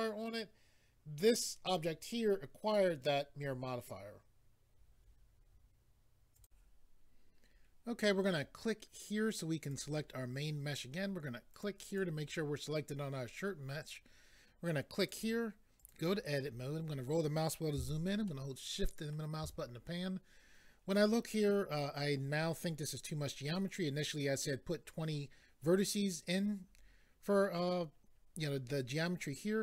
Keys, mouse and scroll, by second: 6.4 click, 9.6 click, 11.5 click, 11.9 click, 15.0 click, 15.8 click, 16.9 scroll up 3, 18.3 scroll up 1.